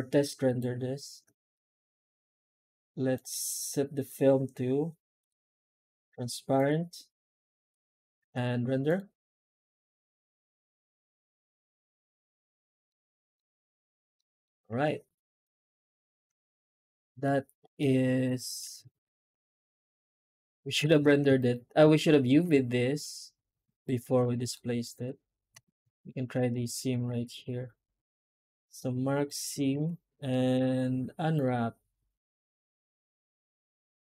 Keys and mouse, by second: 3.1 click, 5.1 click, 6.4 click, 7.6 click, 14.1-15.5 middle drag, 15.9 right click, 16.4 Tab, 17.0 shift+middle click, 17.6 middle click, 18.4 2, 19.2 alt+shift+right click, 19.9 alt+a, 20.3 alt+shift+right click, 21.0 alt+a, 21.3 alt+shift+right click, 22.2 alt+a, 23.6 alt+shift+right click, 24.4 middle click, 25.4 alt+a, 25.8 alt+shift+right click, 29.7 a.